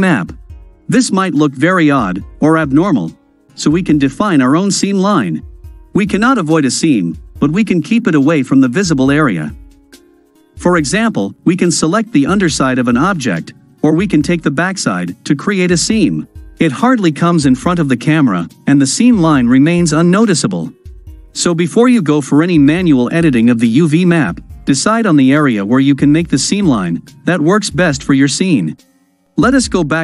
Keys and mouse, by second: 1.7-3.5 middle drag, 4.4-5.6 middle drag, 6.5-7.3 middle drag, 8.0-8.6 ctrl+middle drag, 8.8-9.7 middle drag, 9.7 right click, 9.8 middle click, 10.0-11.6 drag, 15.8-16.7 ctrl+drag, 16.9-18.1 drag, 18.1-19.5 middle drag, 20.8-22.8 middle drag, 23.1-23.5 middle drag, 23.7 middle click, 25.1-27.1 middle drag, 29.4-30.0 drag.